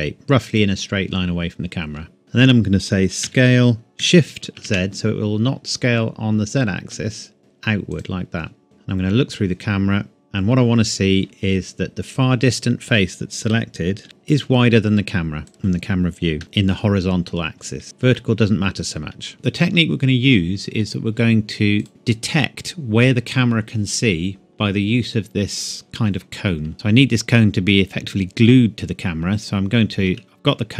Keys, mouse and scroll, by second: 0.5 click, 1.6 scroll up 1, 2.2-3.2 scroll down 1, 3.2 s, 4.6 shift+z, 7.9 click, 8.6 KP_0, 10.5 scroll up 1, 10.6 scroll down 1, 10.9-11.6 scroll up 1, 14.0 shift+z, 15.5 middle click, 16.4 KP_0, 17.8 Tab, 18.2 middle click, 19.2 scroll down 1, 19.3 middle click, 19.7 scroll up 1, 21.8 click, 22.3-23.1 scroll down 1, 26.7-27.4 scroll up 1.